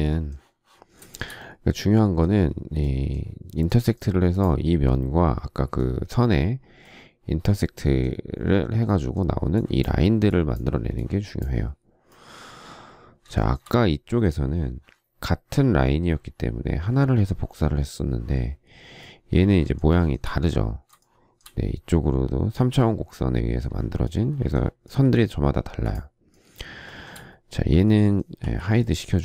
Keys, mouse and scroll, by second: 13.3 shift+middle click, 19.9 shift+middle click, 21.0 shift+middle click, 26.8 shift+middle click, 28.4 h.